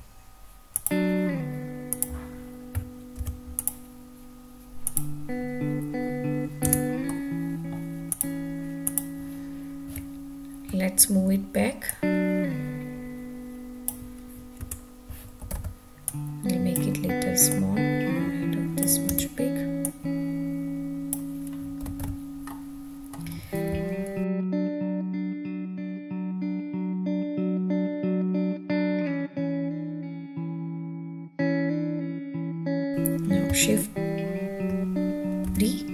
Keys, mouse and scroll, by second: 1.9 click, 3.1 ctrl+r, 4.8 click, 7.0 Tab, 7.0-7.7 middle drag, 8.1 click, 8.8 click, 9.9 `, 11.9-13.9 drag, 14.6 Tab, 15.5 alt+z, 16.0 click, 17.5-18.8 drag, 19.2 Tab, 19.8-21.1 drag, 22.0 alt+z, 22.5-23.1 middle drag, 23.7 `, 24.7-25.9 scroll down 5, 26.7-29.5 drag, 30.2 click, 30.7-31.3 scroll down 2, 31.6-32.3 shift+middle drag, 32.9 Tab, 32.9 alt+z, 32.9 click, 35.5 shift+d.